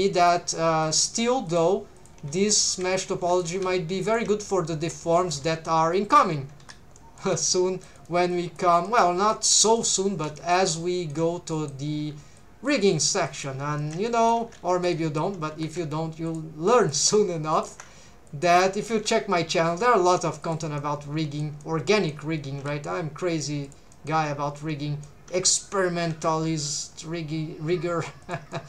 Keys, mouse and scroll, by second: 0.1 shift+click, 0.8 click, 1.1 g, 1.5 shift+click, 2.0 click, 2.1 g, 2.6 shift+click, 3.2 2, 3.3 click, 3.5 g, 4.1 shift+click, 4.5 middle click, 5.4 g, 6.1 shift+click, 6.6 3, 7.0 middle click, 7.3 c, 8.0 right click, 8.3 click, 8.9 middle click, 9.5 middle click, 10.1 alt+a, 10.4 middle click, 10.8 middle click, 11.5 middle click, 12.0 c, 12.8 right click, 13.3 click, 13.8 shift+middle click, 14.1 middle click, 14.4 alt+a, 14.7 3, 14.9 middle click, 15.5 3, 16.3 alt+shift+click, 16.8 alt+shift+click, 17.5 alt+shift+click, 18.3 click, 18.9 s, 20.4 shift+click, 20.8 middle click, 21.6 middle click, 22.5 s, 23.7 shift+click, 23.9 shift+middle click, 24.3 scroll up 2, 24.5 middle click, 26.1 alt+s, 28.2 shift+click, 28.5 middle click.